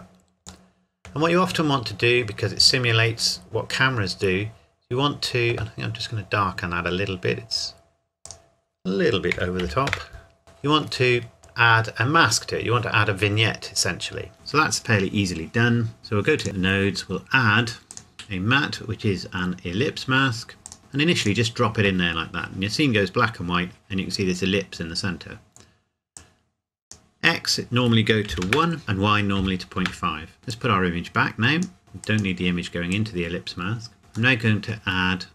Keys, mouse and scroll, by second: 0.7 middle click, 1.5 scroll down 1, 4.7-6.6 scroll up 1, 8.2 click, 9.3 KP_Decimal, 9.6 KP_9, 9.9 KP_Enter, 10.4-11.4 scroll up 1, 13.1-13.5 scroll down 1, 14.3-15.0 scroll up 1, 16.0 middle click, 16.4 click, 20.6 click, 22.8 scroll up 1, 23.5 scroll down 1, 25.0-26.2 scroll up 1, 26.2 click, 28.3 KP_1, 28.4 KP_Enter, 28.8 KP_Decimal, 29.4 KP_5, 29.8 KP_Enter, 30.5 click, 31.8 middle click, 32.0 click, 33.2 click, 34.4 middle click.